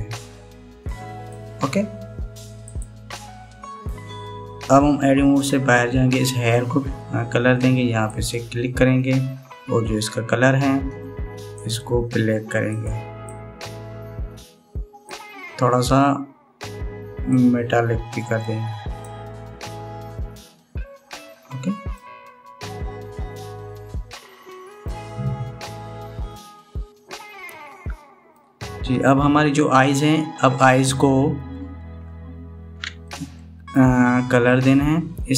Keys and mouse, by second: 3.4 click, 7.7 Tab, 8.8 click, 18.0-19.8 drag, 20.4-22.7 middle drag, 24.8-25.6 middle drag, 26.4-29.1 middle drag, 33.7 shift+middle click.